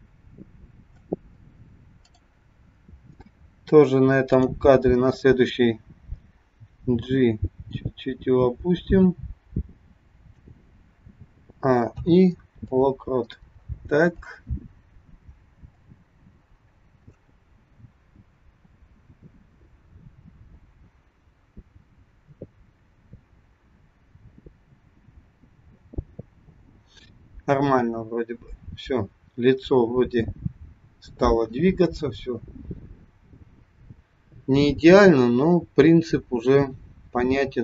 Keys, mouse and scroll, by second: 2.0 click, 4.3 click, 6.9 g, 11.5 a, 12.0 i, 14.1 click, 15.9 click.